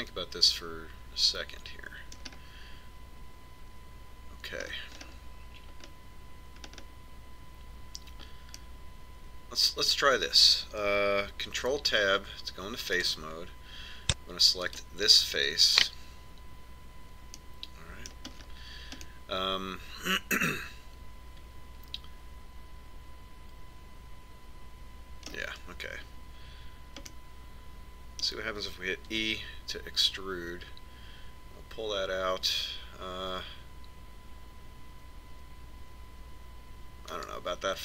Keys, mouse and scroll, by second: 3.2-11.2 middle drag, 12.6 ctrl+Tab, 15.7 right click, 18.4-21.9 middle drag, 28.2-30.1 middle drag, 30.3 e.